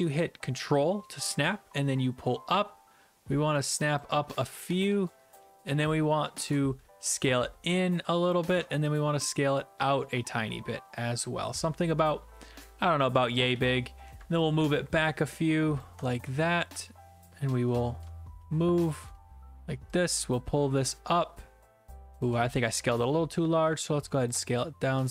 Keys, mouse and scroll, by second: 4.0 ctrl+click, 4.3-6.0 typing, 6.5 shift+click, 8.3 ctrl+click, 13.0 ctrl+click, 15.8 ctrl+click, 16.1 w, 16.4 ctrl+d, 16.9 ctrl+d, 19.1 right click, 22.2 ctrl+click, 24.3 ctrl+click.